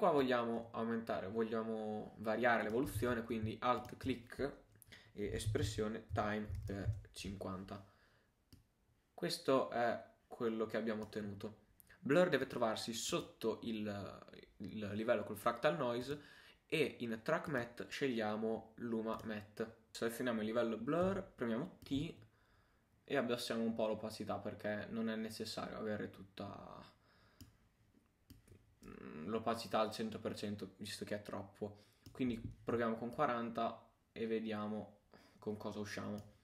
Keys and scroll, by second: 3.0 super+z.